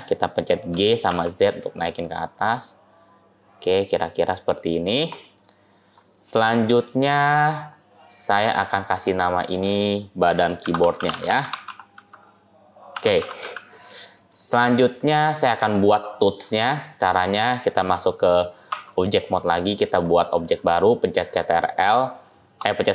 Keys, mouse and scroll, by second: 0.6 g, 3.9 middle click, 4.9 click, 5.3 middle click, 6.1 scroll up 2, 6.2 scroll down 1, 6.5 middle click, 6.9-7.5 scroll up 1, 7.5 scroll up 4, 7.8 scroll down 5, 8.1 scroll down 6, 9.2 scroll down 2, 9.3 click, 9.5 click, 10.9 a, 14.9 middle click, 15.9 middle click, 16.5-18.6 scroll down 3, 16.9-18.6 scroll up 1, 18.6 Tab, 18.6 scroll down 1, 19.1 middle click, 19.9 click, 20.6 middle click, 21.0-21.7 scroll up 2.